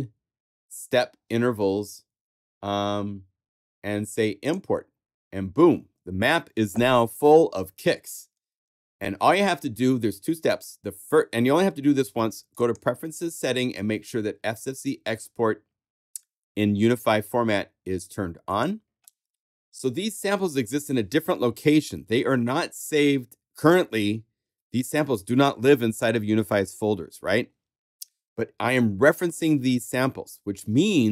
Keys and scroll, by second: 6.6 typing.